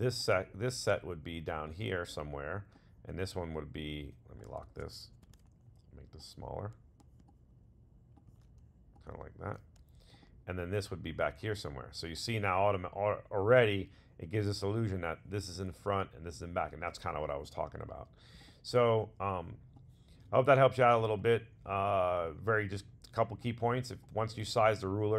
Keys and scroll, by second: 0.3 super+z.